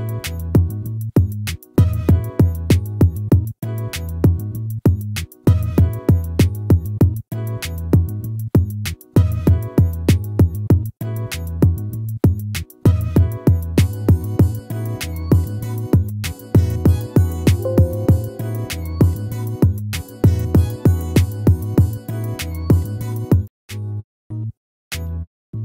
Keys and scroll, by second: 10.6 ctrl+z.